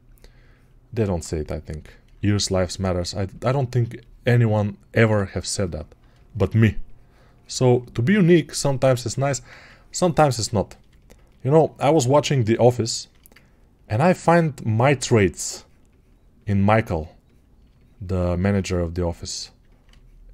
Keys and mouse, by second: 11.6-19.6 drag.